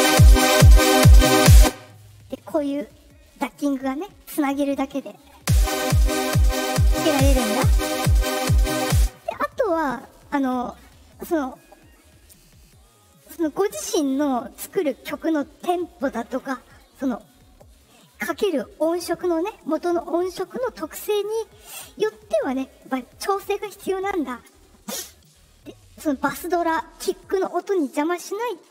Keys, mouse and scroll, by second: 1.5 space, 2.5 click, 5.3 space, 8.9 space, 22.7-25.2 drag.